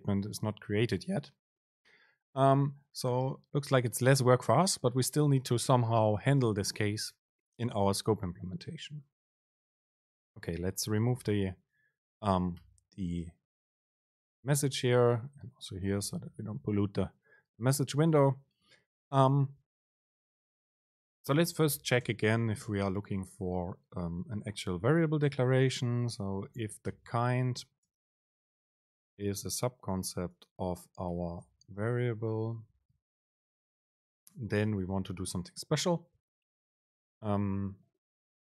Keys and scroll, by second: 11.3 BackSpace, 12.1 Up, 12.5 End, 12.7 Return, 16.1 BackSpace, 22.6 super+space, 27.3 BackSpace, 28.0 super+space, 34.5 Down, 35.0 Up.